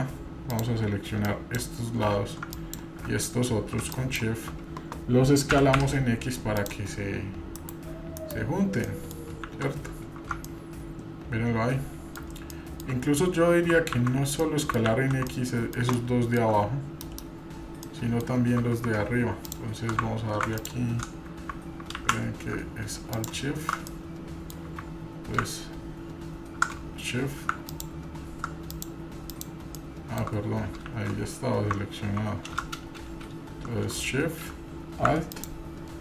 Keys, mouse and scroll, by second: 0.6-1.6 drag, 2.5 drag, 3.9 shift+click, 5.5 s, 8.8 middle drag, 9.8 scroll up 2, 9.8 shift+z, 10.5-12.2 middle drag, 10.5 scroll up 1, 12.5 shift+middle click, 13.4 scroll down 2, 14.0 ctrl+z, 14.4 middle click, 14.9 ctrl+z, 15.3 middle click, 16.0 shift+middle click, 17.6 scroll down 1, 17.8 middle click, 19.5 shift+click, 20.6 alt+click, 22.0 ctrl+z, 23.1 alt+shift+click, 23.9-24.5 middle drag, 27.7 alt+shift+click, 28.7 shift+click, 29.3-29.8 shift+drag, 29.8-30.2 shift+middle drag, 30.3 scroll down 2, 30.8 shift+z.